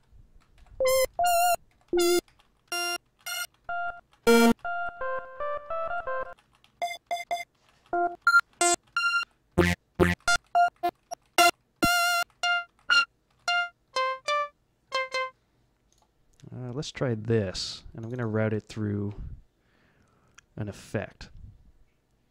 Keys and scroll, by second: 0.0-8.9 typing, 0.5 F7, 1.7 F6, 2.2 Down, 2.4 Down, 3.0 Down, 3.4 Down, 6.6 Down, 7.5 Down, 8.1 Down, 8.3 Down, 9.1 Page_Down, 9.9 Page_Down, 10.0 Up, 10.3 Up, 10.6 Up, 10.8 Up, 11.3 Up, 12.1 Up, 12.3-15.0 typing, 12.6 Up.